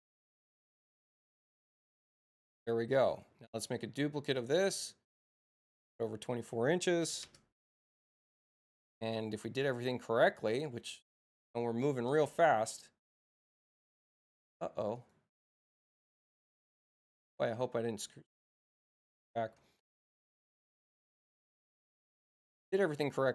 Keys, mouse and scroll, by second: 2.4 space, 3.1 click, 3.7 c, 5.4 click, 10.6 click, 14.9 click, 19.5 space, 21.3 click.